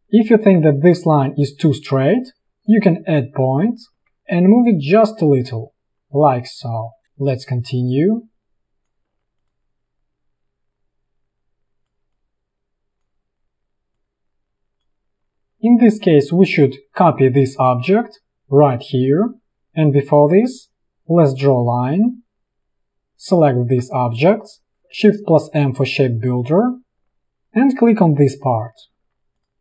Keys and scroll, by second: 2.4 p, 12.0 ctrl+z, 15.3 space, 20.3 p, 25.6 shift+m, 29.0 v.